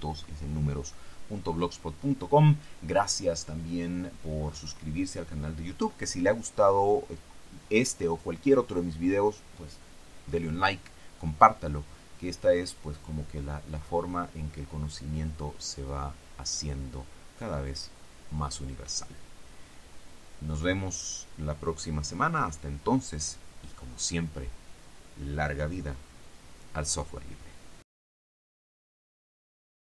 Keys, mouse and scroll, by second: 28.3 click, 29.7 click.